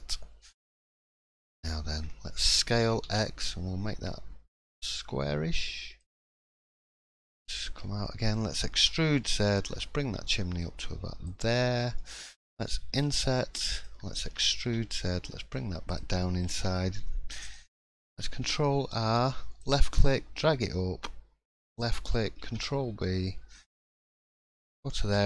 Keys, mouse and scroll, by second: 0.8 middle click, 1.3 scroll up 1, 1.7 shift+middle click, 2.0-2.4 scroll up 1, 2.8 scroll up 1, 2.8 s, 6.2-7.0 scroll down 4, 6.5 middle click, 7.0-7.4 scroll up 3, 7.4 shift+middle click, 7.7 scroll down 1, 8.0 middle click, 8.8 e, 11.7-12.7 scroll up 3, 12.0 middle click, 12.9 i, 14.2 e, 16.2 middle click, 16.9-17.3 scroll down 2, 17.4 click, 18.2 ctrl+r, 25.1 e.